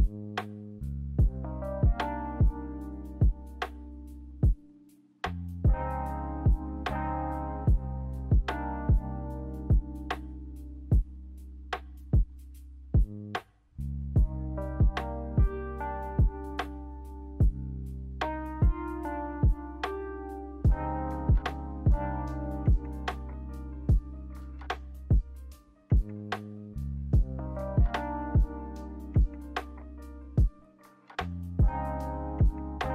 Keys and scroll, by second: 5.3 a, 6.4 Delete, 13.8 Delete.